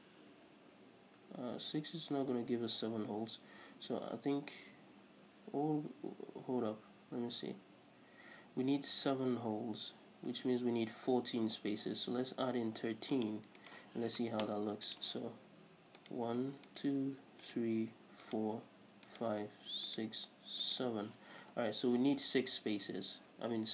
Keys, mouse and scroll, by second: 13.9 right click, 15.1-16.2 drag, 16.2 right click, 16.9 shift+right click, 17.6 shift+right click, 18.4 shift+right click, 19.3 shift+right click, 20.1 shift+right click, 20.8 shift+right click, 21.8 ctrl+z.